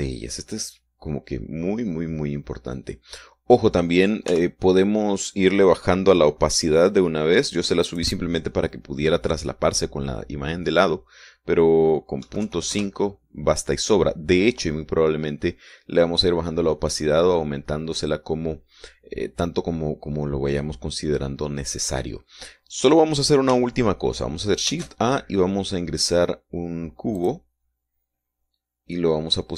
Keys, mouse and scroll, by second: 5.6 n, 9.2 click, 13.5 KP_Decimal, 13.7 KP_5, 14.0 KP_Enter, 26.0 shift+a, 28.5 click.